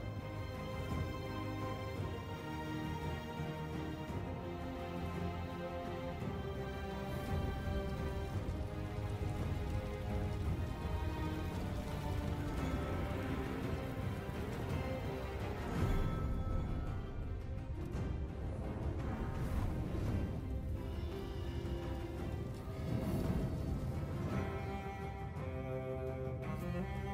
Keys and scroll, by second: 0.3 shift+a, 0.4 Tab, 3.0 Tab, 3.3-7.0 typing, 4.7 Tab, 7.4 Tab, 8.3 shift+d, 8.4 Escape, 8.9 ctrl+j, 9.7 Tab, 9.9-17.7 typing, 10.1 Escape, 17.0 Tab, 17.7 Escape, 18.8 0, 19.3 ctrl+j, 20.3 Delete, 20.4 shift+a, 20.5 Tab, 20.6 Delete, 23.0 Tab, 23.2-27.1 typing.